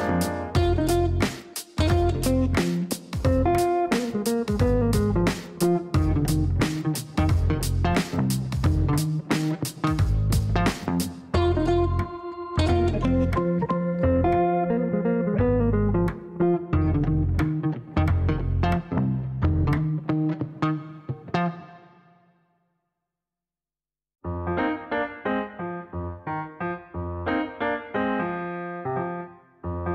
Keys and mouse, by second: 0.5 click, 4.3 click, 6.9 click, 7.6 click, 8.7 right click, 9.9 click, 12.2 click, 13.3 click, 13.5 click, 14.7 click, 15.6 click, 18.7 right click, 20.0 click, 20.8 click, 21.9 click, 22.8 click, 23.5 Delete, 27.8 click, 28.8 click, 29.1 click.